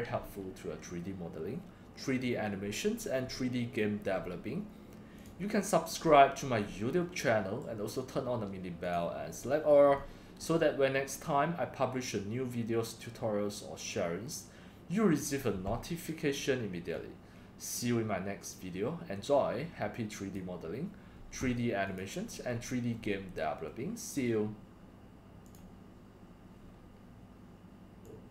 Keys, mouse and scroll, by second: 5.2 click, 5.3 drag, 6.0 middle click, 6.1 scroll, 6.4 middle click, 7.0 middle click, 7.1-8.9 drag, 10.0 scroll down 1, 10.0 scroll down 1, 10.1 click, 10.4 scroll, 11.2-12.1 drag, 12.5-13.1 drag, 14.1-15.2 drag, 16.9-20.3 drag, 21.2 click, 21.9 scroll down 1, 22.1 click, 23.7-24.2 scroll up 1, 25.4 click, 25.5 click, 27.2-28.3 drag.